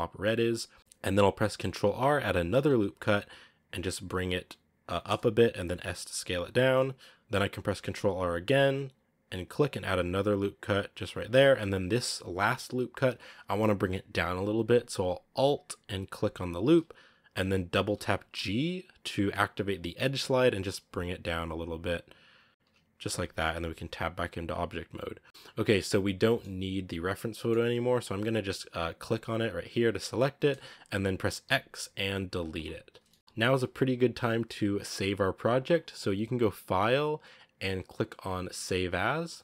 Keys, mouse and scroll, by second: 2.4 ctrl+r, 5.5 s, 7.7 ctrl+r, 16.5 alt+right click, 17.8 g, 22.7 scroll down 1, 23.0 Tab, 23.4 z, 23.6-24.4 scroll down 5, 24.4-25.0 scroll up 1, 25.0 scroll down 2, 25.2-27.0 middle drag, 27.0 scroll up 1, 27.2-27.6 middle drag, 27.6-29.0 scroll up 2, 29.0 right click, 29.6 g, 31.3 x, 32.8 scroll down 2, 33.0-34.8 middle drag, 34.8-36.5 scroll down 1, 36.5-36.9 scroll down 1, 36.9-39.4 drag.